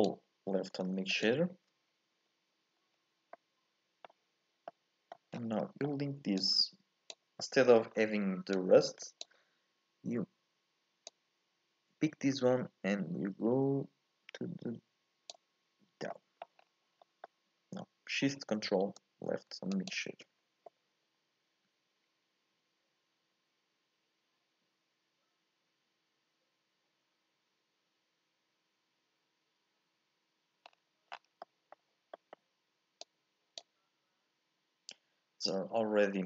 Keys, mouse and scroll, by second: 1.3 ctrl+shift+click, 2.9-3.3 scroll down 3, 3.3 scroll up 1, 3.3-6.5 middle drag, 6.5 click, 8.7 click, 11.2 click, 19.8 ctrl+shift+click, 33.0 click.